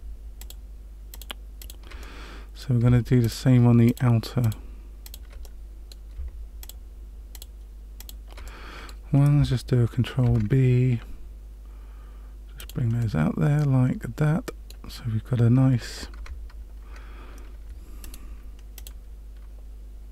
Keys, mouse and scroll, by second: 0.4 shift+click, 1.1 shift+click, 1.5 shift+click, 2.0 middle click, 3.2 shift+click, 3.8 shift+click, 4.4 shift+click, 5.0 shift+click, 5.4 middle click, 6.6 shift+click, 7.3 shift+click, 7.9 shift+click, 8.4 middle click, 10.2 ctrl+b, 13.0 middle click, 16.1 Tab, 18.0 right click.